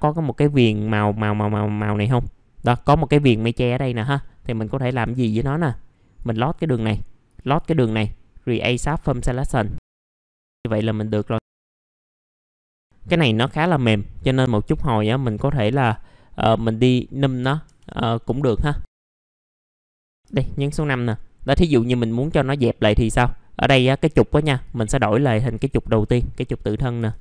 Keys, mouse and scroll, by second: 4.2 alt+middle click, 4.6-5.3 scroll up 2, 6.2 click, 7.2 ctrl+click, 8.7 click, 12.6-13.8 scroll up 1, 13.8 right click, 15.2 click, 15.7 F4, 16.8 click, 17.3 middle click, 17.6 F4, 18.0 scroll down 1, 18.3 alt+middle click, 19.0 scroll up 1, 19.2 F4, 19.4 alt+middle click, 19.6 F4, 19.8 alt+middle click, 24.6-26.6 drag, 27.0 r.